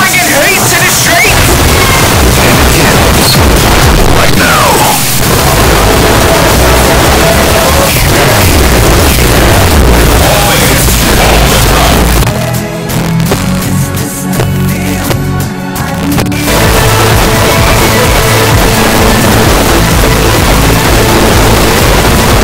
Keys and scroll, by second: 12.2 Page_Down.